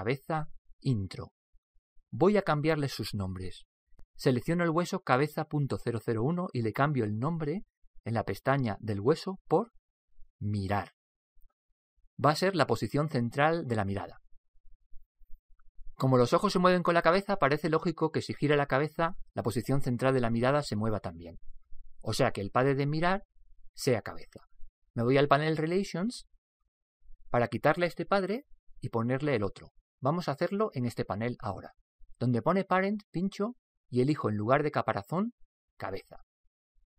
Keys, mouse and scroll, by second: 5.5 right click, 7.4-10.3 drag, 24.2-26.2 middle drag, 34.1 click.